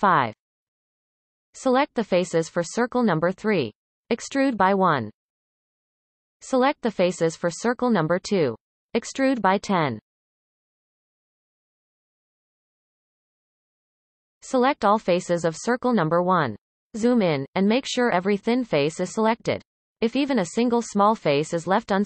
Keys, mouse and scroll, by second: 2.8 click, 3.5 shift+click, 4.4 e, 8.6 click, 9.2 shift+click, 10.0 e, 15.8 KP_1, 16.0 KP_7, 16.7-17.5 scroll up 1, 17.5 alt+a, 17.9-21.1 shift+middle drag, 21.8 c.